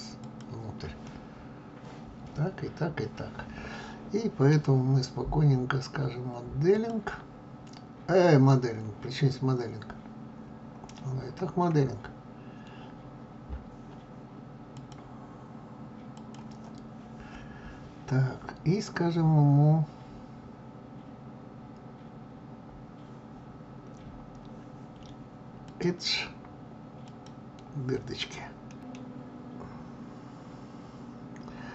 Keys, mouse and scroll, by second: 0.6-6.2 middle drag, 6.3-9.8 drag, 9.8-12.0 scroll up 13, 12.0-14.4 scroll up 1, 14.4-16.3 scroll up 1, 16.3-17.3 scroll up 1, 17.3-24.3 scroll up 1, 24.3-26.8 scroll up 1, 26.8-27.9 drag, 28.3 middle click, 28.8 scroll down 2, 29.4-31.7 scroll up 1.